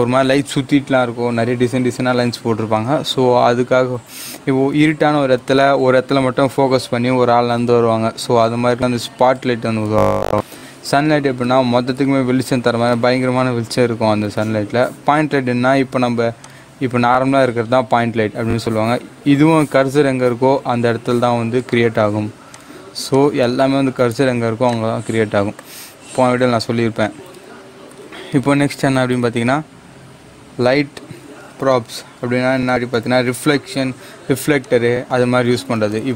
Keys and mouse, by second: 16.3 click, 19.6 click, 21.7 g, 22.5-27.8 drag, 28.8 click, 29.0 shift+a, 34.6 click.